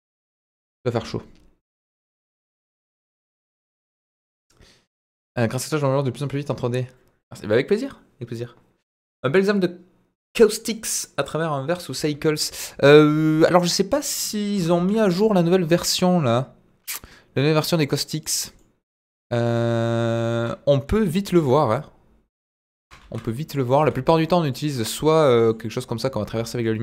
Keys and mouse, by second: 12.6-13.4 middle drag, 14.5 Delete, 14.7 shift+a, 18.6-18.9 middle drag, 19.2-19.8 middle drag, 20.3 KP_1, 21.3 g, 22.7 ctrl+click, 23.0 shift+a, 23.8 s, 24.5 drag, 24.9-25.5 middle drag, 26.0-26.6 middle drag.